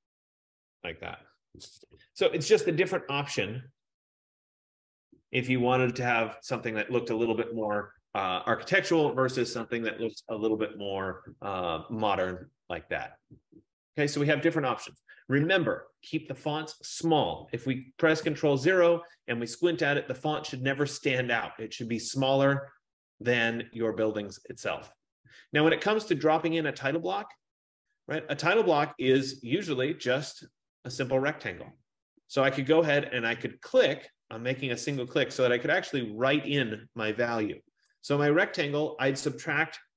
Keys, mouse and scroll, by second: 1.9 Caps_Lock, 4.1 click, 4.9 click, 12.1-12.6 scroll, 18.4 ctrl+0, 30.8 click, 35.1 click.